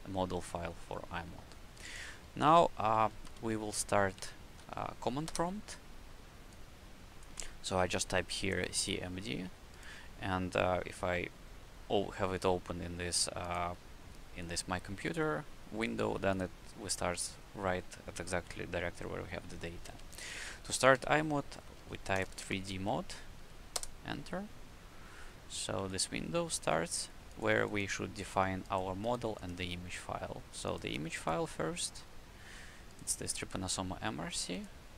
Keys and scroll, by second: 3.2 c, 3.6 m, 4.1 d, 5.2 Return, 20.2-23.1 typing, 23.7 Return.